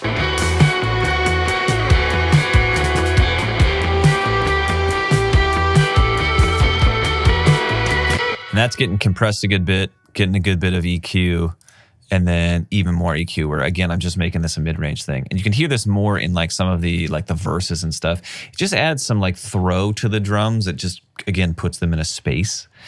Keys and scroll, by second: 8.1 space, 10.4 space, 10.7 alt+super+w, 14.8 alt+super+w.